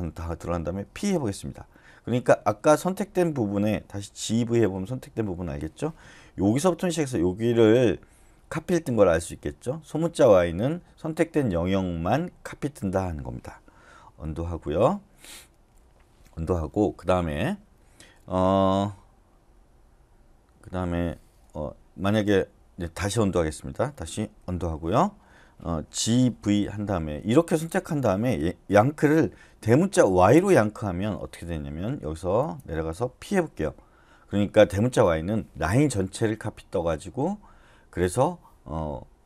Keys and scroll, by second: 0.9 p, 4.3 typing, 14.3 u, 22.8 u, 26.1 typing, 30.1 shift+y, 33.5 p.